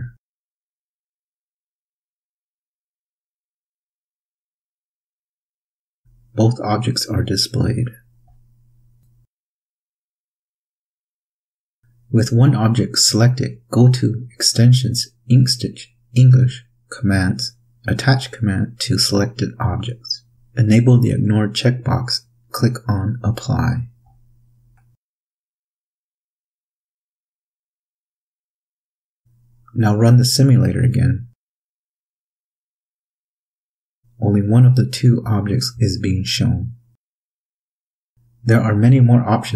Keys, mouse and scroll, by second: 2.8 click, 5.2 Up, 9.4 click, 13.0 click, 13.8 click, 17.7 click, 19.8 click, 20.4 click, 22.3 click, 23.9 click, 25.1 ctrl+scroll up 2, 25.4 ctrl+scroll down 1, 25.5-26.3 ctrl+scroll up 4, 26.8-27.4 ctrl+scroll up 4, 29.5 click, 32.4 click, 34.5 Up, 39.1 click.